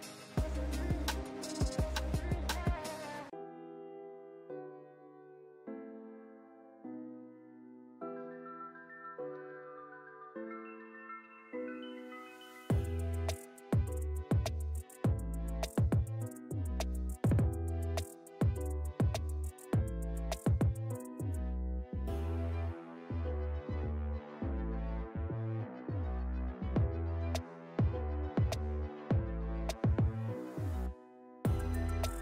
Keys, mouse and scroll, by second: 0.9-1.6 drag, 3.6-4.0 click, 5.0 ctrl+space, 5.1 ctrl+click, 5.3-6.2 ctrl+space, 5.8 ctrl+space, 6.9 click, 7.4 scroll down 1, 9.9 scroll up 1, 11.0 scroll down 1, 11.7 ctrl+space, 11.8 ctrl+click, 12.0 ctrl+space, 13.2 click, 14.6 space, 14.7-15.4 click, 16.0-17.5 drag, 20.5 space, 20.6-21.1 click, 20.8 space, 22.5-24.6 drag, 25.4-27.8 typing, 26.4 click, 27.7 click, 28.2-32.2 drag.